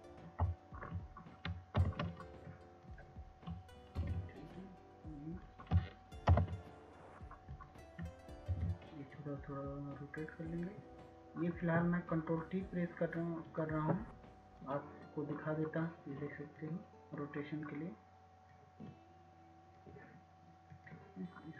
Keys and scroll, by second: 2.0 ctrl+t, 2.8 ctrl+Return, 2.8 ctrl+], 3.5 ctrl+shift+], 4.9 ctrl+[, 7.1 ctrl+t.